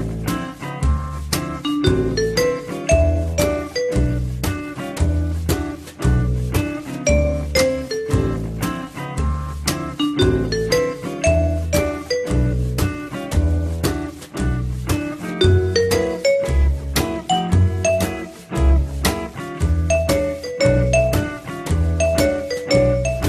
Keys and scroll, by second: 0.3 Delete, 2.8 l, 5.7 w, 14.4 p, 15.3 z.